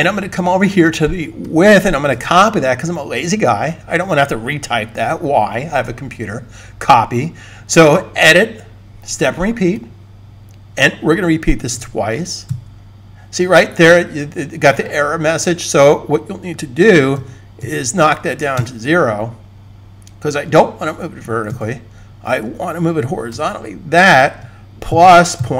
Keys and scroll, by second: 2.0 super+c, 11.6 2, 18.4 0, 23.1 super+v, 25.0-25.5 typing.